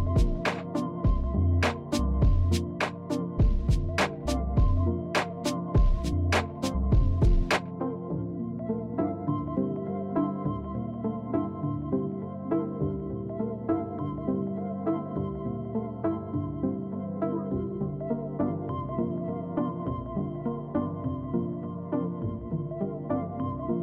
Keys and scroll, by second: 3.2 alt+space.